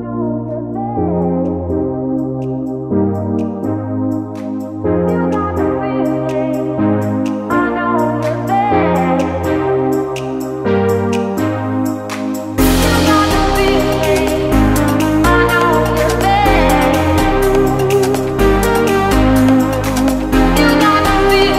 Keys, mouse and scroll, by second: 2.7 right click, 3.7 click, 8.6-9.2 alt+scroll up 2, 9.2-9.6 scroll down 1, 9.6-10.1 scroll up 2, 10.3 click, 11.2 alt+Tab, 11.8 alt+Tab, 12.1 alt+click, 12.9 alt+Tab, 13.6 alt+Tab, 14.8 click, 17.7 alt+Tab, 18.4 alt+Tab, 18.9 click, 19.3 Tab, 20.7 click.